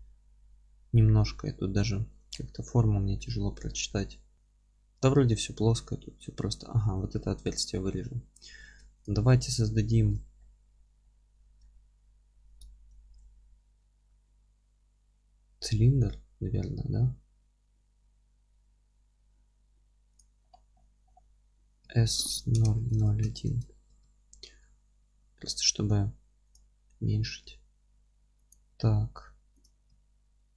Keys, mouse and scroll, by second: 1.1-1.9 scroll up 1, 1.9-2.2 scroll down 1, 3.1 scroll up 1, 3.7 middle click, 3.9-4.3 scroll up 1, 6.2-7.4 middle drag, 6.2-7.4 scroll down 2, 7.7-9.0 middle drag, 8.6 Tab, 9.0 click, 9.3-12.5 middle drag, 9.9 alt+q, 10.3-11.0 scroll up 2, 11.2-12.5 scroll up 2, 12.5 shift+right click, 20.4-21.9 scroll down 2, 21.9 s, 23.6 KP_Enter, 23.9 z, 26.5 click, 26.7-27.0 scroll up 1, 27.4 s, 28.5 click, 28.8 g, 29.6 click, 29.9 s.